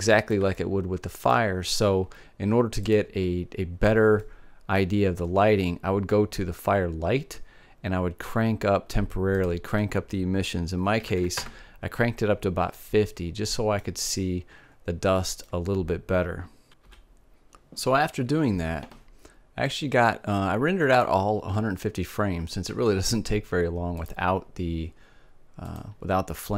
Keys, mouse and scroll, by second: 4.0-5.5 drag, 5.5-7.4 middle drag, 10.3-12.3 drag, 13.7-15.7 middle drag, 16.1-17.7 middle drag.